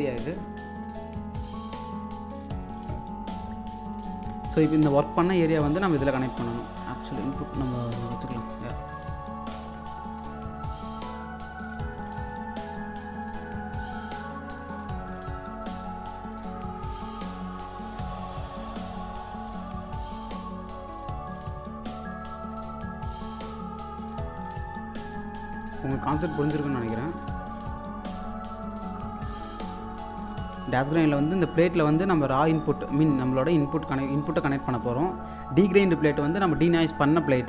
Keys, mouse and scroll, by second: 4.1-8.0 drag, 8.4 click, 9.5 space, 12.7 scroll down 1, 13.5-26.1 ctrl+drag, 13.8 typing, 26.1 scroll up 1, 26.4-29.4 alt+drag, 32.2-37.4 drag.